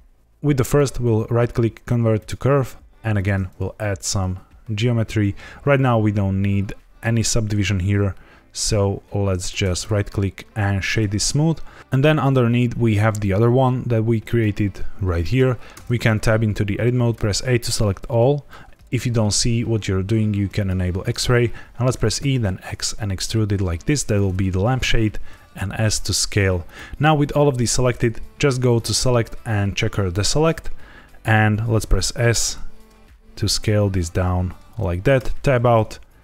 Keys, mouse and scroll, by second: 0.6 right click, 3.1 click, 3.9 shift+click, 9.6 right click, 11.8 click, 14.2 click, 15.7 Tab, 17.1 a, 20.5 click, 21.9 e, 22.1 z, 24.0 click, 24.7 s, 26.6 click, 28.7 click, 31.7 s, 34.6 click, 35.1 Tab.